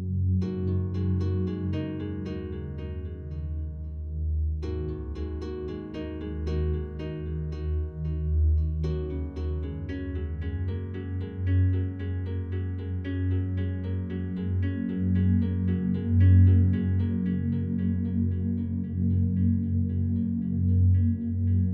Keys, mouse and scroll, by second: 0.5-4.1 alt+drag, 4.1 shift+right click, 4.9-6.3 alt+drag, 6.3 shift+right click, 7.5-11.8 alt+drag, 11.8 click, 14.2 a, 14.7 alt+a, 15.0-20.6 alt+drag, 20.6 ctrl+z, 21.3 ctrl+z.